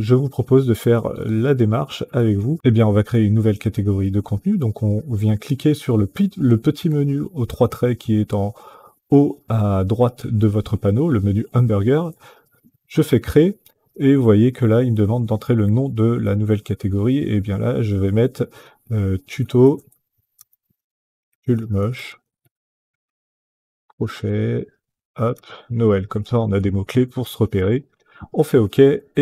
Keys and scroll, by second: 18.9-26.8 typing, 27.3 Return.